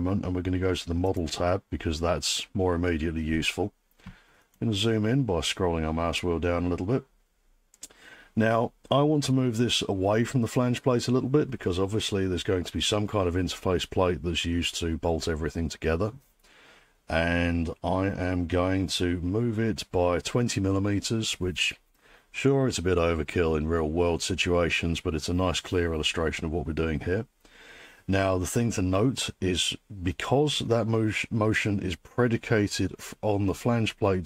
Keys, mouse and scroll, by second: 1.2 click, 4.3 click, 4.3 scroll down 3, 4.5-4.8 scroll, 4.8 scroll down 5, 6.2 scroll, 9.9 scroll down 8.